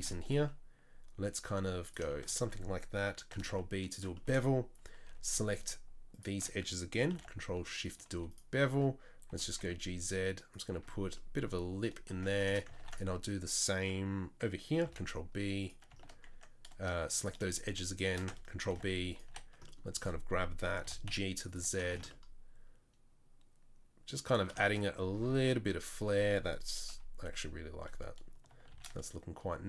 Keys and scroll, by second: 0.0 ctrl+r, 3.4 ctrl+b, 5.0 2, 7.1 ctrl+b, 8.1 3, 9.3 g, 10.7 Tab, 12.1 Tab, 12.8 ctrl+r, 14.9 ctrl+b, 18.7 ctrl+b, 19.3 3, 20.8 g, 21.9 Tab, 25.3 Tab, 26.9 KP_3, 28.7 shift+d.